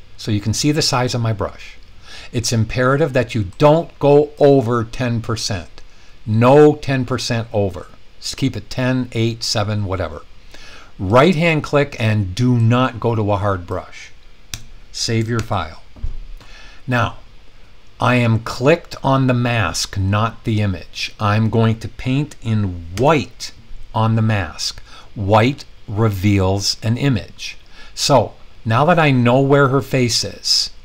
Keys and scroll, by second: 14.4 Return, 15.3 super+s, 22.9 x.